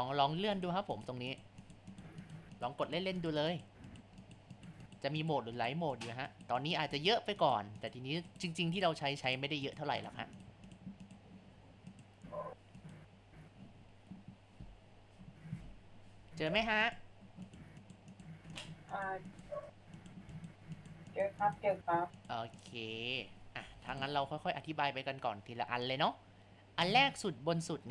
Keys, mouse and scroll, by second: 0.5 click, 1.3 click, 1.7-2.7 drag, 2.9-3.6 drag, 3.9 click, 4.3-4.7 drag, 4.9 click, 5.2 click, 5.6 click, 5.9 click, 6.3 click, 6.6 click, 7.0 click, 7.4 click, 7.8 click, 8.3 click, 8.8-9.3 drag, 9.7 click, 10.0 click, 10.4 click, 11.0 click, 11.9 click, 12.9 click, 13.8-14.2 scroll down 1, 14.2-14.8 scroll up 4, 14.9 scroll down 1, 16.6 click, 17.0 click, 17.5 click, 17.8 click, 18.1 click, 18.7-19.4 drag, 20.0 click, 20.4 click, 20.8 click, 21.1 click, 21.4 click, 22.2 click, 22.6 click, 23.6 Tab, 26.8 click.